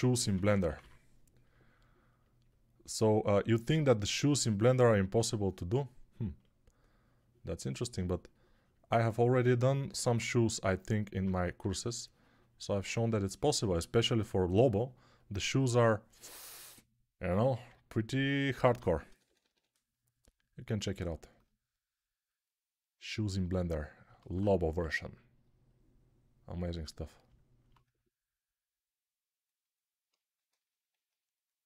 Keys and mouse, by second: 0.0-0.7 typing, 11.5 3, 18.5-19.4 typing, 24.1 alt+q, 26.8 click, 26.8 middle click, 26.8 right click.